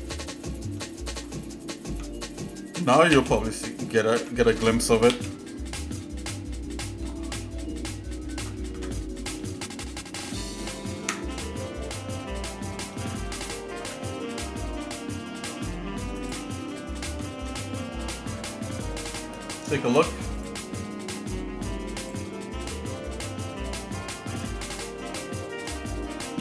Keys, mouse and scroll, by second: 0.9-1.5 scroll down 4, 1.9 Tab, 3.1 a, 4.2 Tab, 5.1 a, 7.1-7.4 scroll down 3, 7.6 scroll up 1, 8.4 shift+middle click, 8.8 Tab, 9.2 click, 11.1 Tab, 12.2 shift+middle click, 13.8 alt+m, 16.7 shift+middle click, 17.1 Tab, 17.7-19.1 shift+middle drag, 20.4 click, 22.3 click, 23.2 middle click, 23.8 scroll down 1, 24.4 middle click, 25.0 shift+middle click.